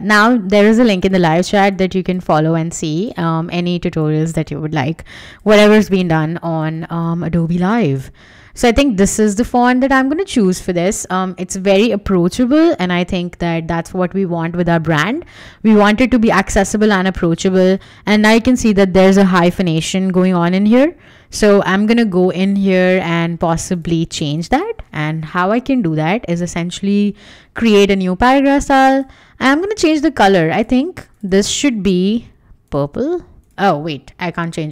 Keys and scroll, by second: 2.4 Escape, 5.9-7.5 typing, 10.2 Escape, 25.7 Escape, 30.7 Escape, 32.9 Escape, 33.8 super+z, 34.1 Escape.